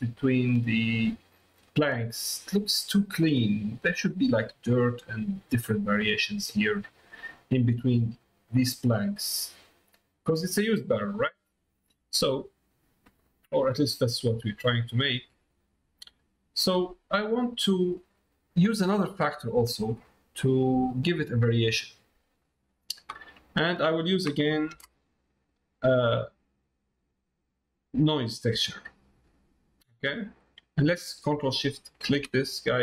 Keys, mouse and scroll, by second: 0.5 middle click, 1.6 middle click, 2.9 shift+middle click, 7.5 middle click, 8.8 middle click, 10.0 middle click, 11.8 middle click, 12.6 middle click, 13.1 middle click, 13.8 middle click, 14.9 middle click, 16.1-17.3 drag, 17.5 middle click, 18.5 middle click, 23.6 middle click, 31.7 ctrl+shift+click.